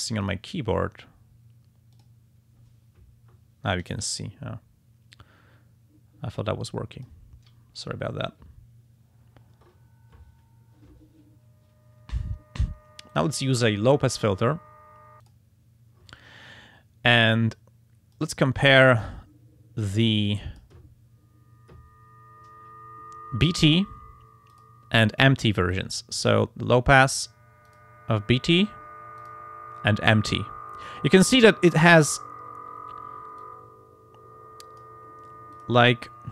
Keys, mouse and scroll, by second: 0.2 click, 1.9 click, 4.2-7.3 drag, 13.2 click, 15.2 click, 18.1 click, 19.8 click, 24.5 click, 25.7 click, 27.7 click, 29.2 click, 33.4-35.0 drag, 35.6 click.